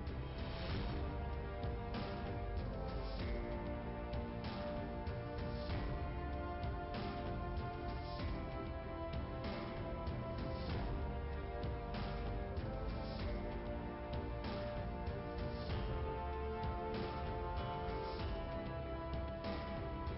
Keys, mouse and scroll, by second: 1.7 click, 1.9 click, 2.6 click, 4.3 click, 5.6 click, 9.0 click, 10.2 click, 15.5 click, 15.8 click, 15.9 double click, 16.6 double click, 18.5 click, 18.6 click.